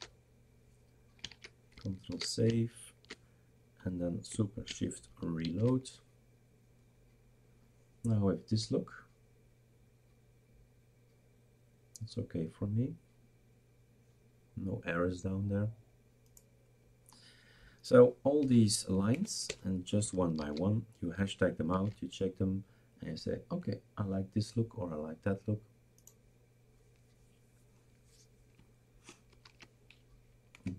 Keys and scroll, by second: 2.1 ctrl+s, 5.7 shift+super+r, 18.4 #, 19.1 Down, 19.4 BackSpace, 20.4 ctrl+s, 21.8 shift+super+r, 29.3 #, 30.7 Down.